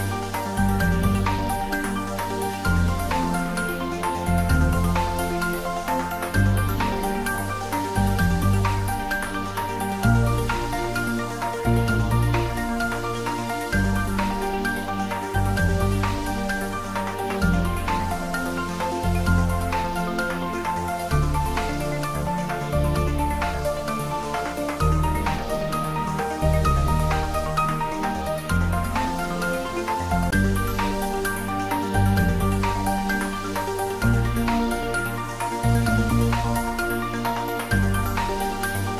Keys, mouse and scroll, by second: 1.7 shift+right click, 3.6-4.2 middle drag, 5.5 scroll down 1, 6.2 shift+a, 10.4 click, 11.5 scroll up 1, 12.3 s, 14.9 click, 15.5 `, 15.8 3, 17.0 scroll down 1, 17.3 middle click, 18.3 s, 20.9 click, 21.2 s, 21.6 z, 22.7 click, 23.4 s, 24.2 click, 24.5 scroll down 1, 26.1 click, 26.8 scroll up 1, 28.2 shift+z, 29.5 g, 29.9 z, 34.3 click, 34.8-35.1 scroll up 1, 36.5 g, 37.1 Right.